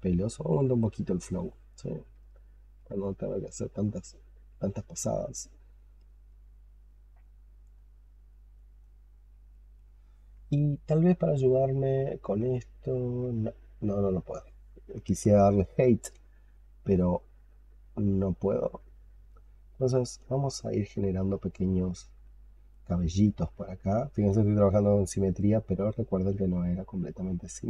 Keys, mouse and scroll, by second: 3.9 double click, 4.4 double click, 4.7 double click, 5.0 double click, 5.3 double click, 5.6 double click, 6.0 double click, 6.4 double click, 6.8 double click, 7.1 double click, 7.4 double click, 7.7 double click, 7.9 double click, 8.2 double click, 8.4 double click, 8.7 double click, 9.1 double click, 9.4 double click, 9.6 double click, 14.9 alt+click, 17.1 double click, 17.4 double click, 17.7 double click, 18.0 double click, 18.2 double click, 18.8-19.9 alt+drag, 20.6 double click, 20.8 double click, 21.1 double click, 21.4 double click, 21.6 double click, 21.9 double click, 22.8 double click, 23.1 double click, 23.3 double click, 23.5 double click, 23.8 double click, 24.6 double click, 24.9 double click, 25.0 double click, 25.2 double click, 26.5 double click, 26.9 double click, 27.1 double click, 27.4 double click.